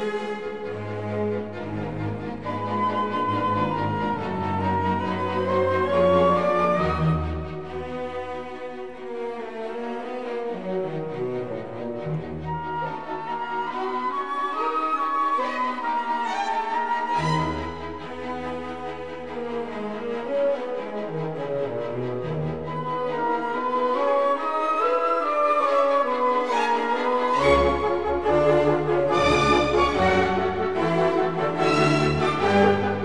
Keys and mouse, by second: 0.8 3, 1.4 click, 2.3 shift+click, 3.3 KP_7, 4.1 ctrl+KP_7, 5.2 e, 10.1 click, 13.5 2, 14.0 click, 17.5 KP_3, 18.4 g, 18.5 z, 20.9 click, 22.6 ctrl+r, 24.1 click, 25.3 click, 28.0 e, 30.4 click, 31.8 shift+click, 32.5 e.